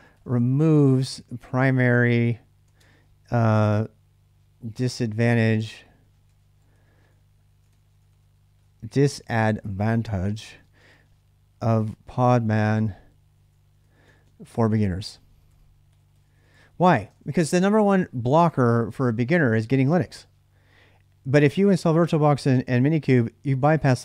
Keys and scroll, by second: 0.0-2.6 typing, 4.2-17.8 typing.